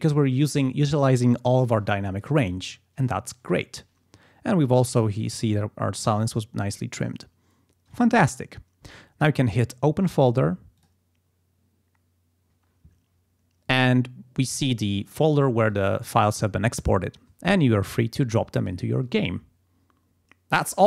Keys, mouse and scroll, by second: 10.8 click, 12.5 click, 15.7 click.